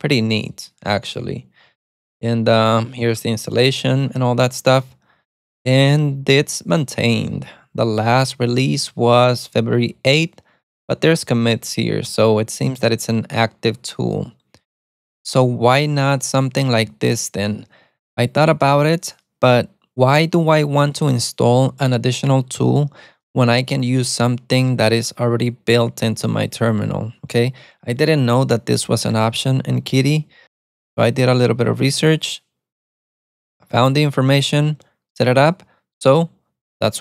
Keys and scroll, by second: 17.2 super+Tab.